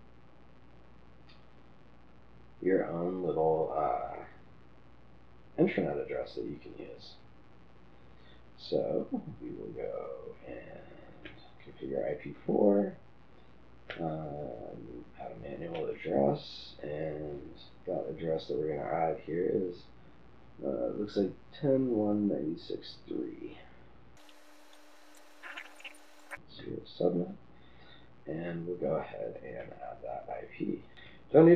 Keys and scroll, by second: 24.3-26.6 typing, 25.5 Tab.